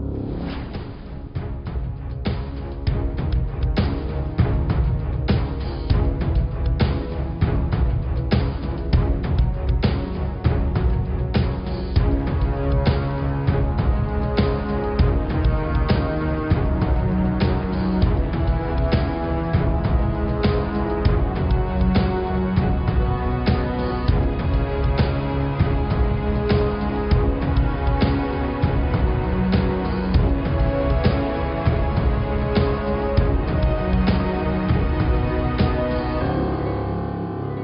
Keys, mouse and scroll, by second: 0.2 click, 1.1 click, 1.8 Tab, 2.5 click, 2.9 Tab, 3.1 click, 3.5 Tab, 4.4 click, 5.8 s, 8.3 click, 8.6 Tab, 8.9-9.9 middle drag, 9.9 Tab, 10.4 ctrl+z, 10.6 middle click, 11.3 Tab, 12.1 click, 13.1 s, 14.2 Tab, 14.8-16.2 middle drag, 16.2 click, 16.5 click, 16.9-17.2 scroll up 3, 17.2 middle click, 17.6 click, 17.8 scroll up 2, 18.0-20.3 middle drag, 23.2-25.4 middle drag, 25.6 middle click, 26.4 Tab, 26.8 click, 27.3 click, 28.1 g, 30.7-32.5 middle drag, 32.5-32.8 scroll up 2, 32.8-35.1 middle drag, 35.6-37.4 middle drag.